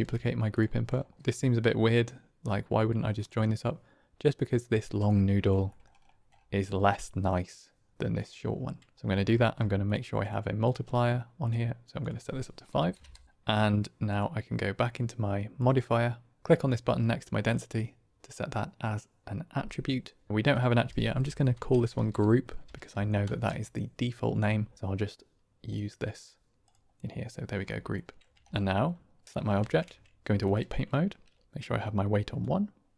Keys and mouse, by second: 3.3-5.4 drag, 5.7 click, 7.3-8.1 drag, 9.0 click, 9.3 q, 10.6-11.4 drag, 11.9-13.2 drag, 13.2 g, 14.0 click, 15.6 click, 17.4 click, 20.3-24.6 drag, 25.6 click, 27.9 click, 28.4 ctrl+space, 29.2 ctrl+Tab, 29.5 ctrl+Tab, 31.4 click, 31.4 f, 32.3-32.9 drag.